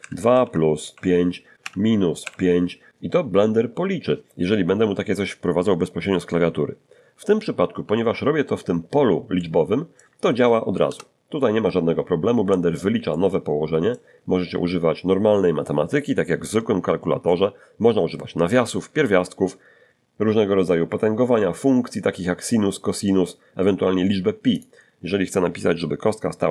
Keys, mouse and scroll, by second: 0.0-2.1 typing, 9.3 ctrl+middle click, 10.8 Return, 13.1-14.1 ctrl+middle drag, 14.2-14.6 ctrl+scroll up 1, 24.5 click.